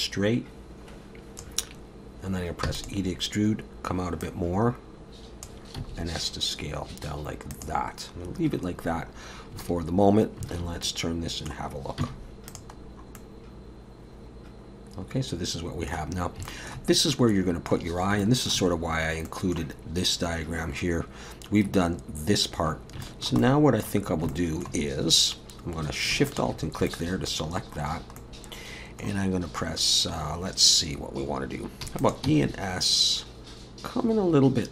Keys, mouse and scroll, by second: 2.7 e, 4.2 click, 5.8 s, 8.9-9.5 scroll down 2, 10.5 alt+a, 10.8 middle click, 12.0 z, 12.8-13.5 scroll down 2, 13.2 middle click, 16.4 scroll up 1, 16.5 shift+middle click, 17.1 middle click, 17.9 scroll down 3, 18.2 shift+middle click, 18.9 scroll up 2, 19.3 middle click, 23.0 shift+middle click, 23.4 middle click, 24.1 scroll up 3, 24.3 shift+middle click, 26.3 alt+shift+click, 26.9 middle click, 27.9 scroll down 1, 28.2 middle click, 31.8 e, 32.2 s.